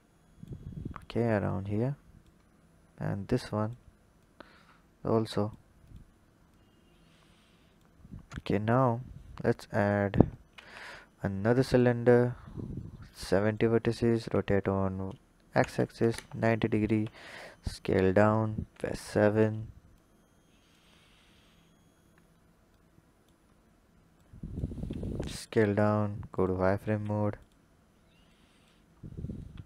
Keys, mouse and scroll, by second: 1.4 click, 2.4-3.5 scroll down 6, 3.5 click, 4.1 click, 5.8 click, 6.4 click, 7.9-8.7 scroll down 1, 8.7-10.4 drag, 10.4 shift+a, 12.6 click, 14.1 r, 16.8 s, 18.5 KP_7, 19.8-21.2 drag, 21.2-22.7 scroll up 6, 22.7 click, 23.4-24.1 scroll up 1, 24.1 click, 24.8 s, 26.2 drag, 26.8 s, 28.2 click, 28.9-29.4 scroll up 2, 29.4 s.